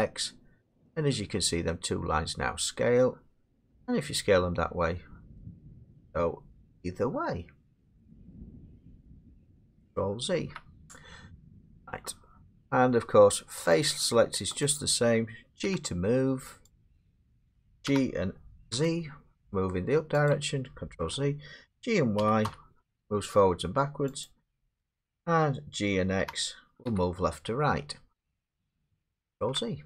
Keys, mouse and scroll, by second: 9.3 click, 10.2 ctrl+z, 11.6 click, 13.8 click, 14.6 click, 15.6 g, 16.8 click, 17.7 ctrl+z, 17.9 g, 18.7 z, 20.3 click, 21.0 ctrl+z, 22.2 g, 22.5 y, 24.2 click, 24.8 ctrl+z, 26.2 g, 26.9 x, 28.6 click, 29.4 ctrl+z.